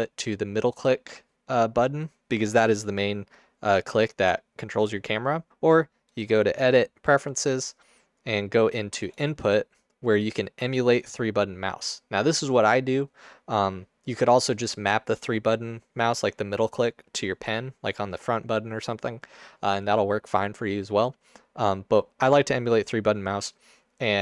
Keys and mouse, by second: 6.2-7.3 drag.